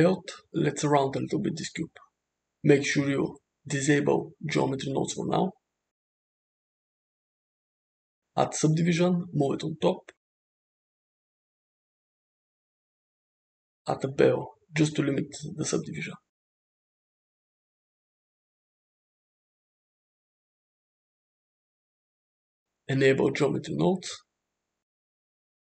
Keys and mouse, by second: 1.0-1.7 middle drag, 1.9 shift+middle drag, 2.4 click, 2.9 s, 5.4 click, 6.7-8.7 drag, 10.3-11.4 drag, 13.0 click, 13.9-15.0 drag, 16.2-17.1 drag, 18.4-20.3 shift+drag, 23.4 click, 25.1 click.